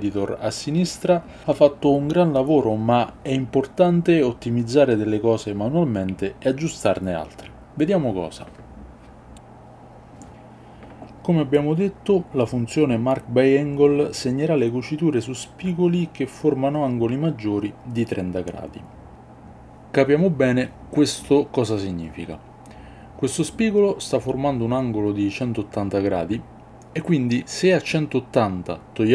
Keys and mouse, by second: 18.6 click, 20.6 click, 21.5-22.5 drag, 23.4 KP_1, 24.9 click, 25.8 click, 27.1 middle click, 27.6 middle click, 28.3-29.1 drag.